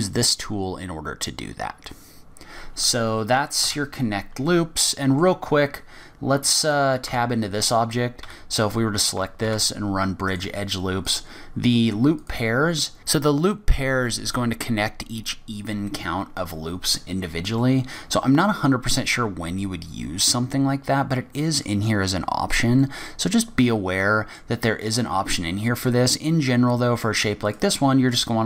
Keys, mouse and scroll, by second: 3.6 Tab, 4.5 middle click, 5.5 scroll down 4, 5.7-6.6 scroll up 4, 6.6 click, 7.0 Tab, 7.5-8.2 scroll up 2, 8.2-8.6 scroll up 1, 8.2 a, 9.1 scroll up 1, 9.4 ctrl+e, 11.0 click, 12.7 middle click, 13.5 middle click, 16.1-16.5 scroll up 2, 17.1-17.6 scroll down 2, 17.6 middle click, 22.8 middle click, 27.4 click.